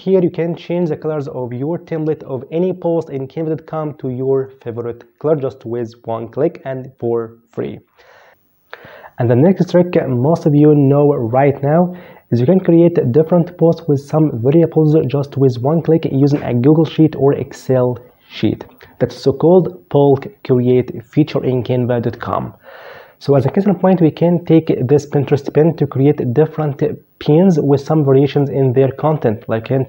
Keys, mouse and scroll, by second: 8.3 click.